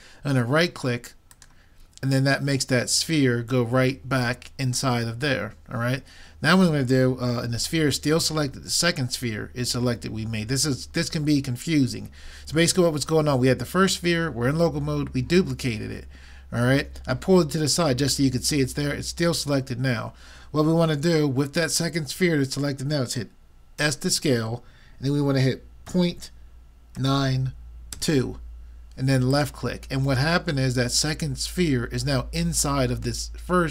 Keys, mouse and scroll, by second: 23.9 s.